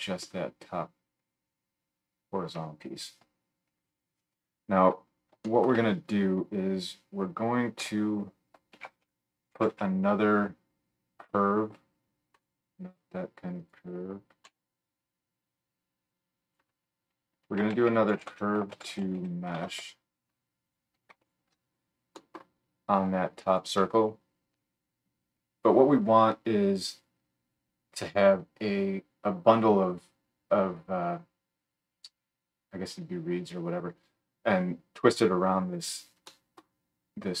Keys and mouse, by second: 7.8 F3, 13.6 middle click, 14.0-16.1 drag, 14.4 x, 16.1-20.7 middle drag, 20.7 alt+click, 21.2 alt+shift+middle click, 21.4-23.0 alt+shift+drag, 23.0-37.4 middle drag.